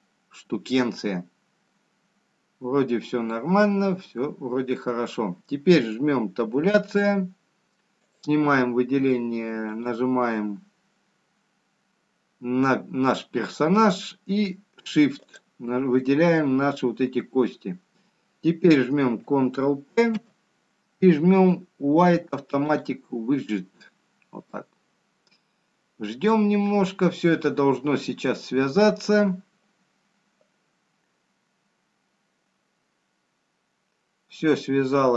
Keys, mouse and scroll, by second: 0.7 middle click, 0.7-1.1 scroll down 2, 2.8 middle click, 2.8-3.9 scroll up 3, 7.7 scroll down 2, 9.0 Tab, 10.4 click, 12.8 click, 17.8 shift+click, 22.5 ctrl+p.